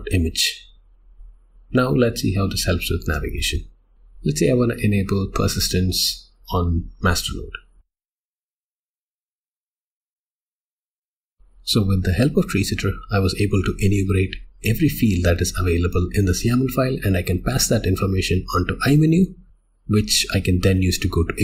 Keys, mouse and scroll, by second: 1.2 click, 11.1 Return, 15.5 Return.